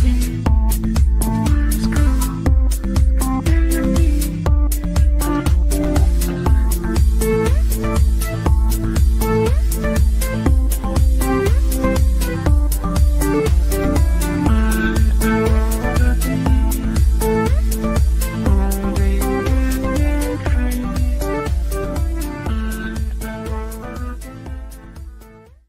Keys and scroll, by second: 10.2 w, 15.5 F9.